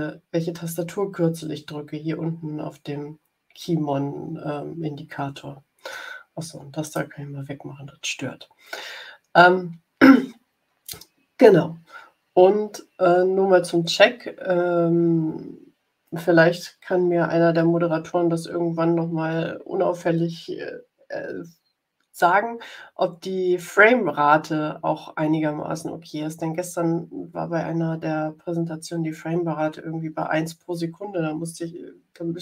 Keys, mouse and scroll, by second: 6.8 click.